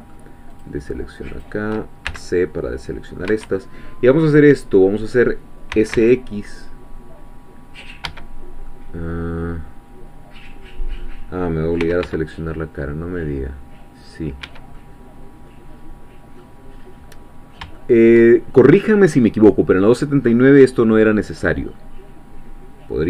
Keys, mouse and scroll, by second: 0.6-1.6 shift+drag, 2.1 shift+c, 2.5 shift+middle click, 2.6 shift+click, 3.3 Escape, 3.6-5.7 drag, 5.7 s, 5.9 x, 8.0 Escape, 8.4 scroll down 1, 8.7-11.2 drag, 11.2 middle click, 11.8 s, 12.0 x, 14.5 Escape, 14.8-16.6 middle drag, 17.0-17.5 scroll up 4, 17.8-23.0 shift+middle drag.